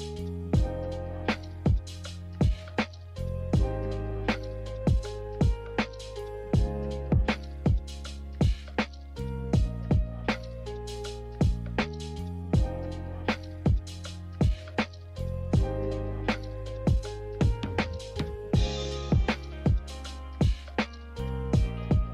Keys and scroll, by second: 5.2 a, 14.5-15.5 typing, 19.5 typing, 20.6 a.